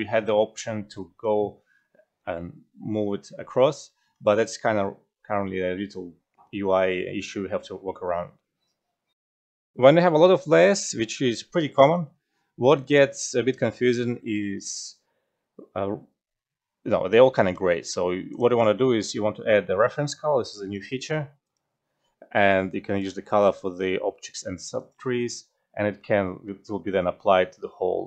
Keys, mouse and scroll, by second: 0.0-0.4 typing, 3.4-4.2 typing.